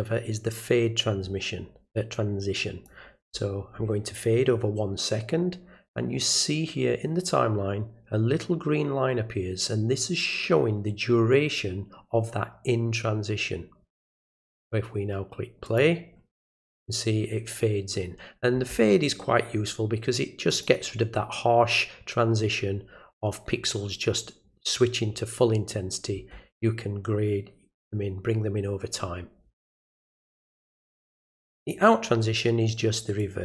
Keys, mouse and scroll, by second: 2.6 click, 15.6 click, 20.5 click, 31.6 click, 33.2 click.